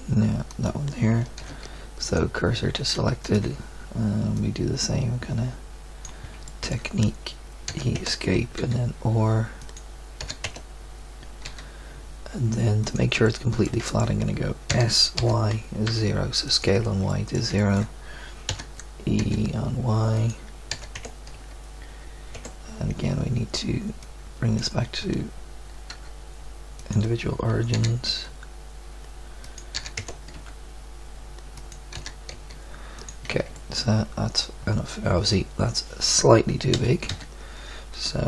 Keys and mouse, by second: 1.4 shift+s, 7.7 e, 8.6 r, 10.2 e, 11.4 r, 13.3 click, 14.7 s, 18.5 e, 20.7 e, 21.3 s, 25.9 s, 27.7 e, 29.7 e, 30.3 s, 31.9 e, 36.7 a, 37.1 a.